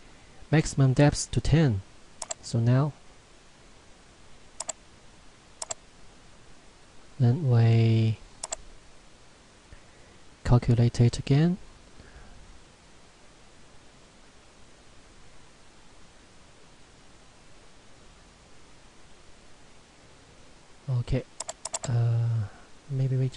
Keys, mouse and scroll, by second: 2.2 click, 8.4 click, 19.8 middle click, 21.4 click.